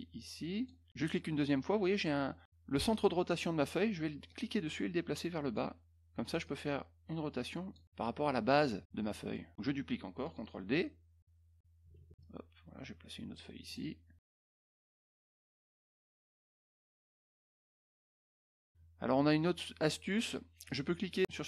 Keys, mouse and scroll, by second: 0.9 click, 4.2-5.5 drag, 6.4-7.7 drag, 9.3 middle click, 11.9 ctrl+d, 12.2-13.3 drag, 13.6 click, 14.2 click, 14.7 click, 16.3 ctrl+d, 16.4 click, 17.1 click, 18.0 click, 19.7 middle click, 20.6 click, 21.2 middle click.